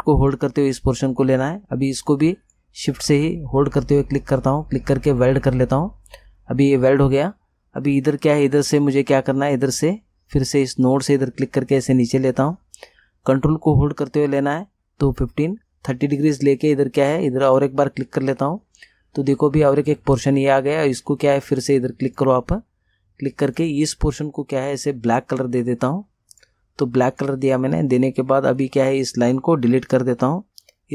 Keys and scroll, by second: 29.8 Delete.